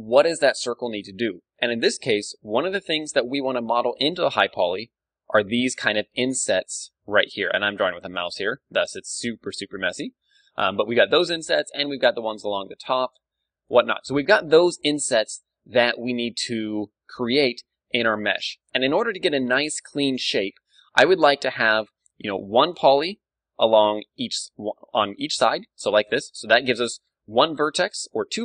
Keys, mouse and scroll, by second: 4.5 d, 4.7-9.4 drag, 6.0 d, 7.1 d, 7.6 d, 8.9-9.6 typing, 9.6-11.2 drag, 11.3-13.5 d, 11.6-15.6 drag, 14.5 d, 14.6 n, 15.6 a, 16.3-18.0 drag, 16.8 n, 18.0-23.4 middle drag, 22.9 d, 23.4-26.9 drag.